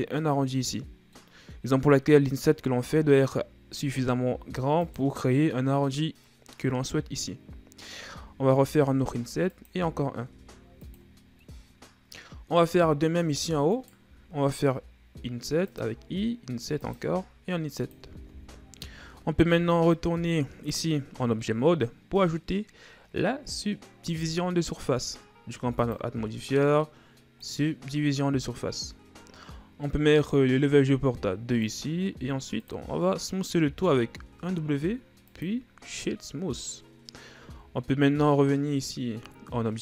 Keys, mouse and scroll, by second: 2.8 s, 9.4 i, 9.7 i, 11.4-13.7 middle drag, 13.7 alt+right click, 14.7 i, 15.9 i, 17.0 i, 18.3 Tab, 19.5 KP_1, 25.8-28.8 drag, 31.6-33.6 drag, 33.6 w, 37.4 Tab.